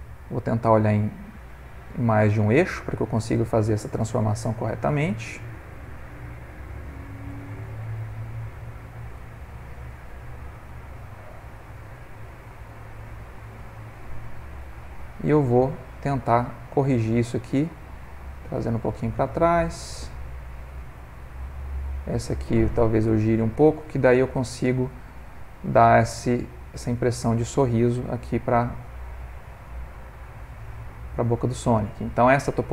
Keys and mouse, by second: 0.3 g, 2.7 click, 3.6 click, 4.1 g, 9.1 click, 10.6 click, 11.6 click, 12.1 g, 15.3 click, 15.9 middle click, 17.0 middle click, 17.9 g, 22.0 click, 23.9 click, 24.9 r, 28.5 g.